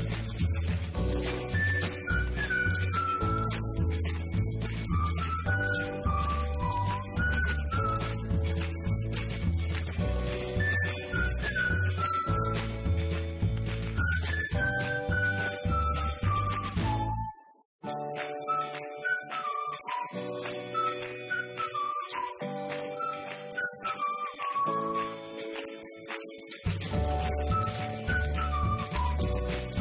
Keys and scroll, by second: 23.3-24.7 typing, 25.9 BackSpace, 27.1-29.8 typing.